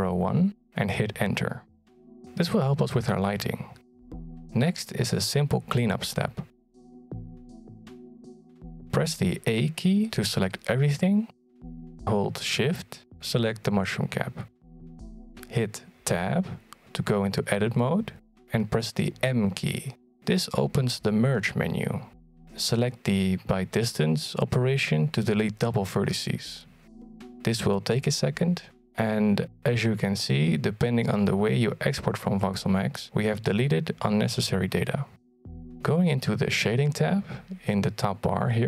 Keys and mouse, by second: 4.5-7.6 middle drag, 8.5-9.7 middle drag, 11.5 a, 12.9 Tab, 18.3 Tab, 19.1 a, 20.6 m, 33.6 Tab.